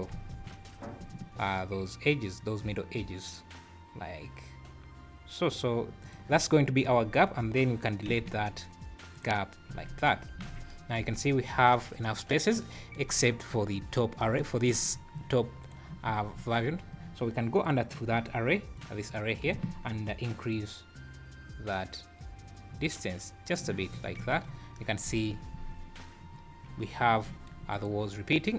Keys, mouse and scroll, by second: 0.1 ctrl+b, 8.1 x, 9.7 Tab, 10.1 scroll down 2, 10.4 alt+a, 11.1-11.6 scroll up 2, 13.1 scroll up 2, 15.6 click, 17.6 click, 18.8 click, 19.1 click, 20.5 shift+click, 23.9-24.7 scroll down 8, 24.2 alt+a, 25.1 z, 25.6 scroll up 3, 27.7 click.